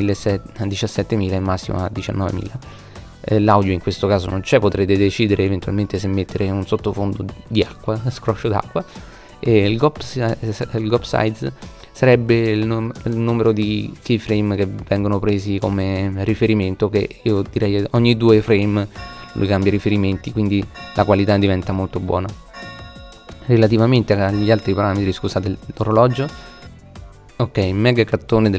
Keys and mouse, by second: 1.6-3.2 middle drag, 11.6-13.5 middle drag, 13.9-15.8 middle drag, 20.1-21.3 middle drag, 21.3 click, 21.8 middle click, 25.0 click.